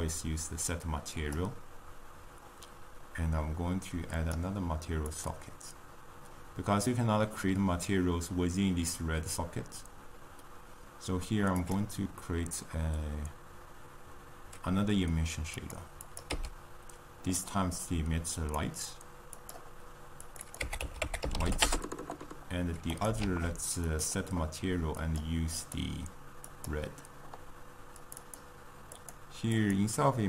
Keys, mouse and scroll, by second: 4.6-15.7 drag, 16.5-20.4 drag, 20.7-23.2 drag, 23.2 shift+d, 25.6-30.2 drag.